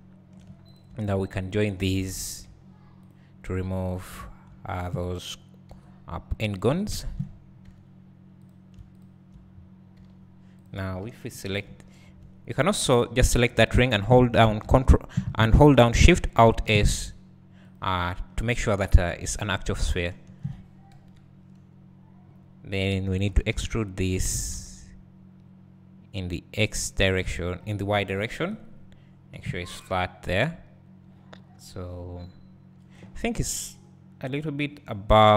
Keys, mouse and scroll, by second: 0.7 click, 1.5 shift+click, 2.6 j, 3.1 click, 4.7 shift+click, 5.9 j, 6.6 click, 6.9 shift+click, 7.8 j, 8.5 click, 9.0 shift+click, 10.1 j, 10.6 click, 11.5 ctrl+KP_Add, 12.6 shift+click, 16.8 alt+shift+s, 17.7 click, 20.1 shift+click, 20.9 KP_3, 23.4 e, 26.9 click, 27.1 s, 32.0-32.5 scroll up 2.